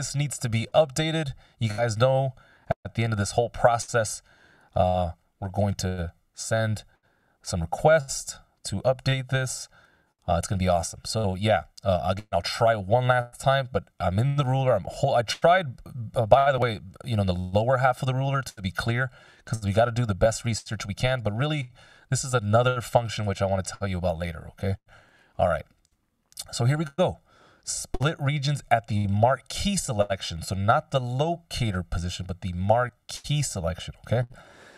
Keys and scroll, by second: 4.7 super+s, 12.3 Delete, 14.0 c, 24.6 c.